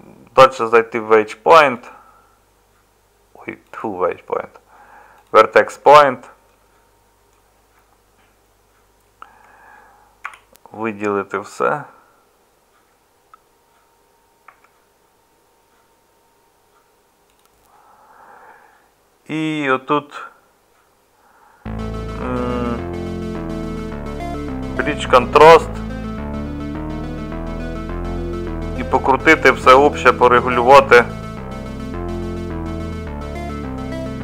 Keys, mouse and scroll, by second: 9.2 Tab, 10.2 a, 14.5 Tab.